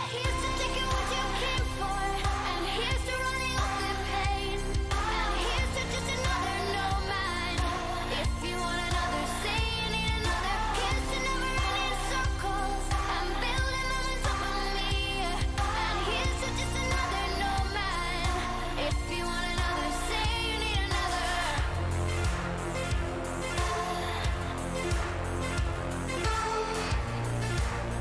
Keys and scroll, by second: 5.1-9.4 typing, 9.6 Down, 9.8 Return, 16.4-19.1 typing, 20.0 Return.